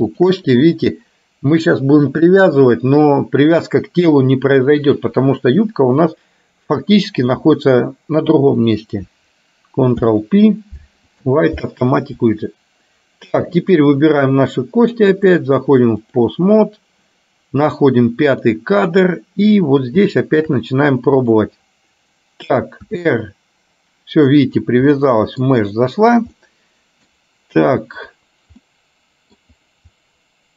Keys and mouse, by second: 0.2 shift+click, 9.9 ctrl+p, 13.7 click, 15.2-16.4 drag, 18.4 click, 20.3 shift+middle click, 23.1 r, 24.9 middle click, 26.4 middle click, 28.1 click, 28.8 middle click.